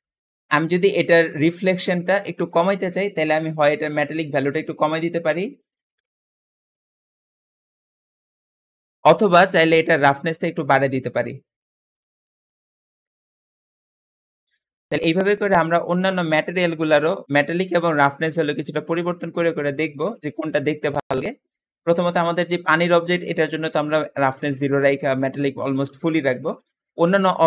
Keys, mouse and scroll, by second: 4.8-5.9 drag, 5.7-6.6 typing, 6.7 click, 7.3 click, 12.1 click, 12.7-14.1 drag, 12.9-14.2 typing.